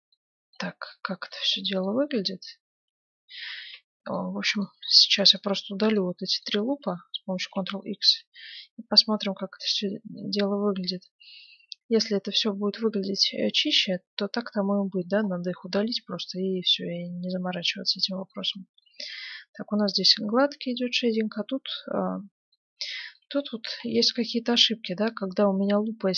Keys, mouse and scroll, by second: 2.7 Tab, 3.4 middle click, 3.5 ctrl+Tab, 4.5-8.3 right drag, 7.4 ctrl+x, 8.0 Tab, 8.7-13.0 middle drag, 15.2-17.6 middle drag, 18.5-22.4 middle drag, 22.8-26.1 middle drag, 23.8 ctrl+z.